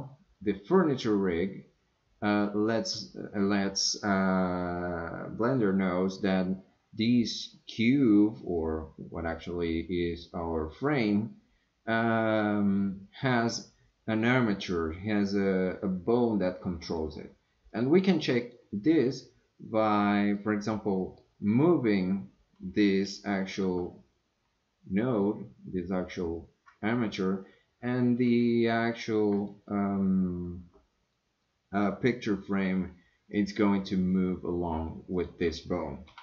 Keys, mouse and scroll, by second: 16.9 click, 17.7 click, 18.4 click, 20.4-21.2 middle drag, 23.6 g, 29.4-35.2 drag, 36.0 g.